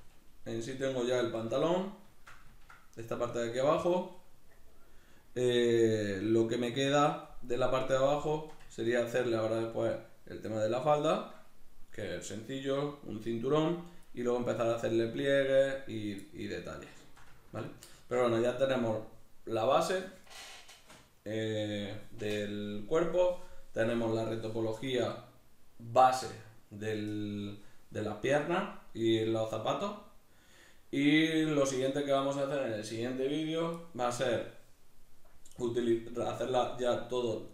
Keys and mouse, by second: 0.5 right click, 1.2-18.2 shift+middle drag, 18.2 right click, 23.9 right click, 29.0-33.0 middle drag.